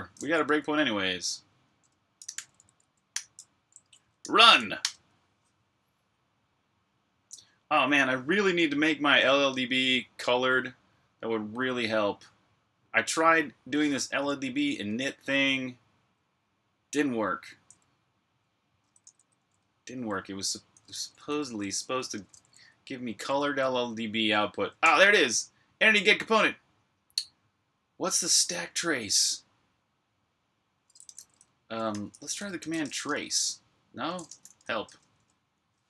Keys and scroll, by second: 1.8-3.0 typing, 4.0 r, 14.6 super+Tab, 19.0 Escape, 19.2 j, 20.8-23.3 typing, 21.4 Escape, 24.6 k, 30.9-35.2 typing.